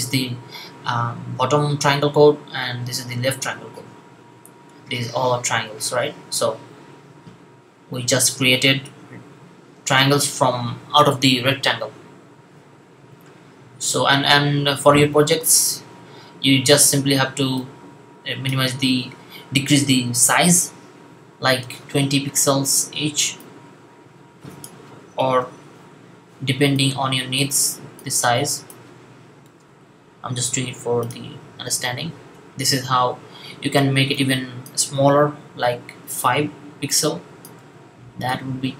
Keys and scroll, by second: 21.3 typing, 25.1 typing, 29.3 typing, 35.8 5, 37.4 typing.